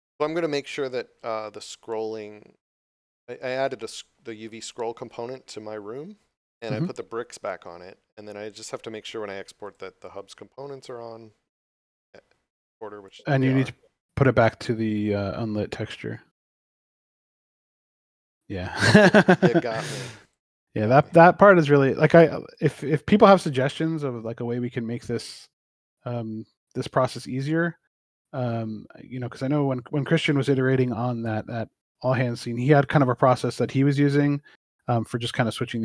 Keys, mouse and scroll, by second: 9.5 click, 13.0 click, 17.4 click, 20.1 click, 21.6 x, 26.0 click, 28.8 shift+middle click, 29.7 scroll up 1, 31.0 click.